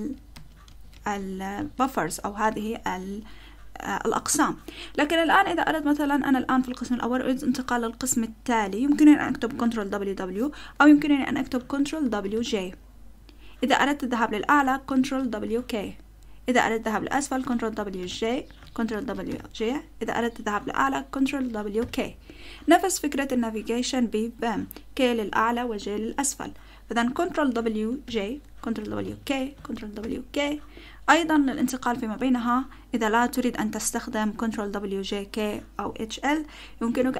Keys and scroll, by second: 0.7 ctrl+w, 0.9 ctrl+w, 12.0 ctrl+w, 12.4 j, 14.9 ctrl+w, 15.4 k, 17.5 ctrl+w, 18.0 j, 18.9 ctrl+w, 19.3 j, 21.2 ctrl+w, 21.8 k, 27.6 ctrl+w, 28.0 j, 28.8 ctrl+w, 29.0 k, 29.8 ctrl+w, 30.0 k.